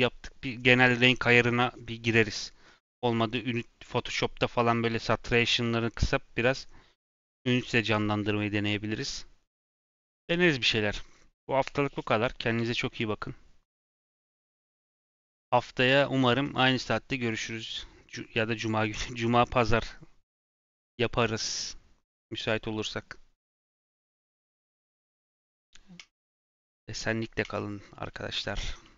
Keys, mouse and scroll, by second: 23.4 scroll down 2, 23.6-24.9 scroll up 2.